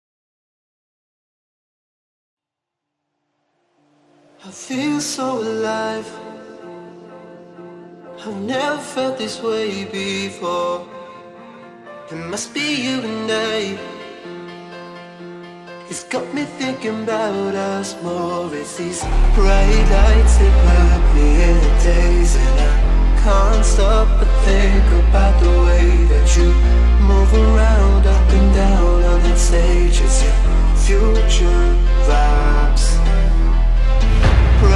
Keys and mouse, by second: 4.4 Right, 7.6-8.5 click, 10.0 Right, 10.7 click, 11.3 right click, 12.4 click, 12.8 right click, 14.0 click, 15.4 right click, 16.2 click, 17.7 right click, 18.3 click, 20.2 ctrl+-, 21.5 space, 21.7 click, 21.9 space, 22.5 click, 22.7-23.0 space, 23.1 click, 23.3 space, 24.1 click, 24.3 space, 25.6 ctrl+=, 26.4-29.2 typing, 26.5 click, 26.8 click, 27.4 ctrl+-, 27.9 click, 28.7 ctrl+=, 29.2 click, 30.0 click, 30.6-32.8 alt+drag, 33.9 ctrl+=, 34.2 space, 34.3 click, 34.5 space.